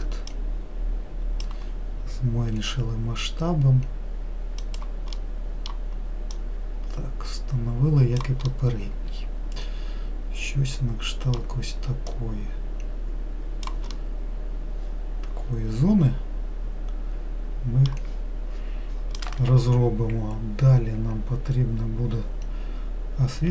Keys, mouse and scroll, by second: 0.6 click, 2.8 s, 5.4-6.6 middle drag, 6.6 click, 8.8-11.8 middle drag, 12.4 click, 14.3-17.4 middle drag.